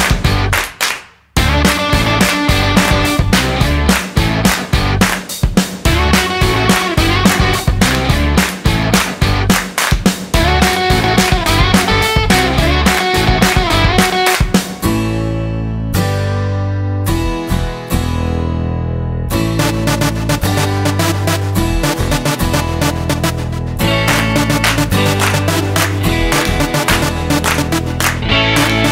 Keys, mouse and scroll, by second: 0.1-0.4 scroll down 3, 1.3 s, 6.5 Tab, 7.0 Tab, 7.4-7.8 scroll down 3, 7.8 middle click, 8.7 shift+middle click, 9.5 middle click, 11.7-12.2 scroll up 3, 12.2 middle click, 12.9 shift+middle click, 15.0 shift+a, 18.9 click, 22.2 click, 23.5 click, 25.8 middle click, 26.2 scroll up 3.